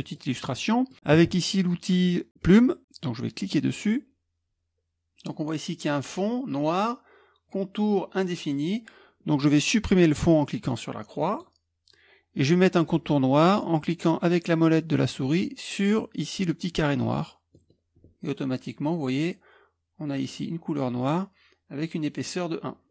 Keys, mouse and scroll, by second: 3.4 click.